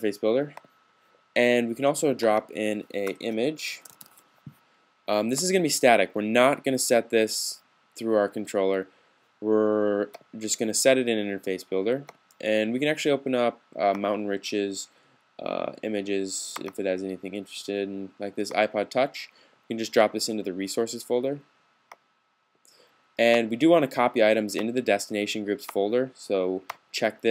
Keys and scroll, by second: 3.2-4.4 typing.